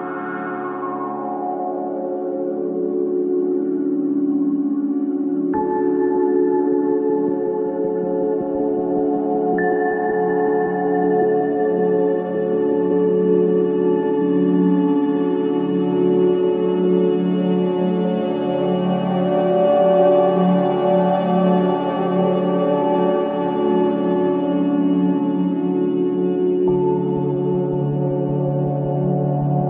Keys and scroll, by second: 3.8 c, 5.7 Escape, 6.0 F2, 7.1 Escape, 11.0 space, 11.7 c, 12.0 Escape, 12.9 F4, 22.1 F2, 23.3 g, 24.9 space, 26.2 c, 27.2 F3, 27.9 F4.